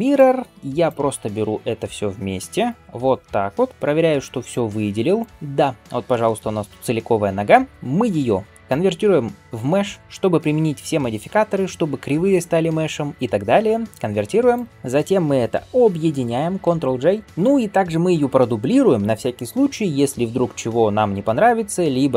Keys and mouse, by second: 2.3-22.1 shift+drag, 3.0-22.1 middle drag, 3.7 g, 5.3 g, 8.5-22.1 right drag, 17.1 ctrl+j, 17.2 ctrl+a.